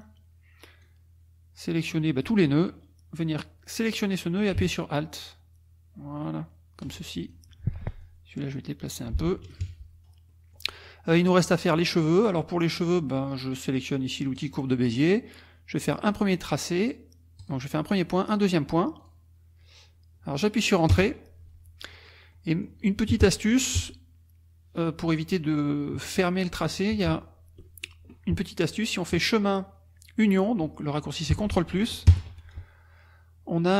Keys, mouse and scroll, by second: 0.8-2.4 drag, 3.2-7.0 drag, 7.3 alt+click, 7.5 alt+F1, 8.0 alt+click, 8.5-9.2 scroll down 2, 9.2 F1, 9.5 KP_Subtract, 10.3-11.5 drag, 11.7 click, 14.4 click, 17.4 click, 19.0 click, 20.9 Return, 21.9 click, 22.3 click, 29.1 click, 31.3 Escape, 32.1 ctrl+KP_Add.